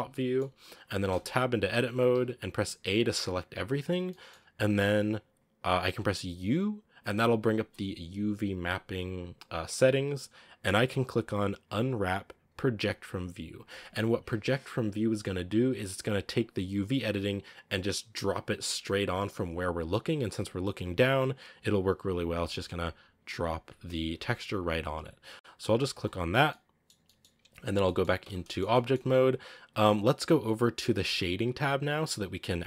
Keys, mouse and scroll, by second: 0.0-1.0 shift+middle drag, 1.0 Tab, 2.0 a, 2.4 a, 4.0 shift+middle click, 4.6-5.3 scroll up 1, 25.9 scroll up 1, 26.3 scroll down 1, 26.4-28.1 middle drag, 28.1 Tab, 28.2 scroll down 3, 28.4 shift+middle click, 28.8 scroll up 2.